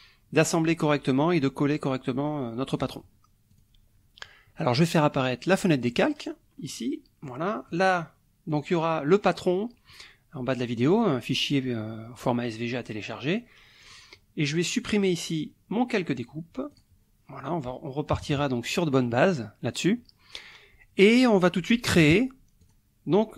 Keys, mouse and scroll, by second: 3.5 click, 4.7 click, 5.9 click, 7.2 click, 8.5 click, 13.9 click, 16.7 click, 17.4 click, 18.1 KP_Subtract, 19.0 click, 22.6 click.